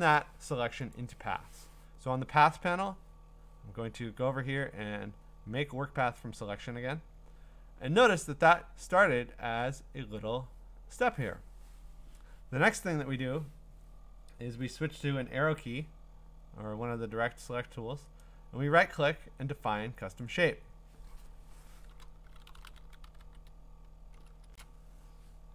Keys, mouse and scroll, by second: 1.0-4.0 drag, 6.2 click, 18.2 right click, 20.2 click, 22.0-23.7 typing, 24.4 Return.